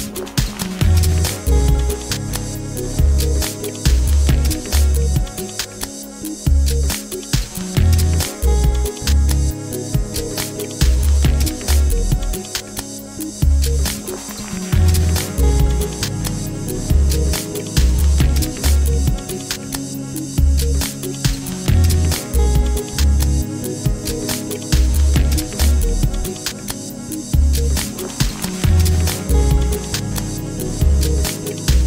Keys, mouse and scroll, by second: 0.4 click, 3.2 Tab, 3.7-7.7 middle drag, 8.1-9.3 scroll down 2, 9.3 click, 9.6 Tab, 10.8 r, 15.2 Tab, 16.0-16.5 scroll up 3, 16.5-17.8 middle drag, 17.8 scroll up 1, 17.8 scroll down 1, 18.1-18.8 middle drag, 18.8-19.8 scroll down 2, 19.8-22.3 middle drag, 22.8 shift+a, 25.9 s, 26.1 s, 26.6-27.2 middle drag, 27.3 click, 27.4 s, 27.6 click, 27.9 s, 28.3 middle click, 28.5 Tab, 28.7 a, 29.0 click, 29.6 click, 30.3 e, 30.6 middle click, 30.7 click, 30.8 e, 30.9 middle click, 31.2 x, 31.4 middle click, 31.4 click, 31.7 a.